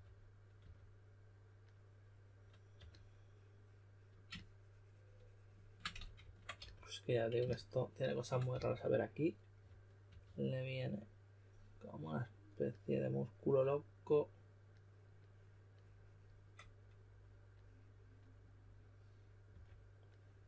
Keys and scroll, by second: 0.0-0.6 typing, 2.7 typing, 5.9 super+z, 6.2 super+z, 6.5 s, 8.5-10.5 typing, 19.4 typing.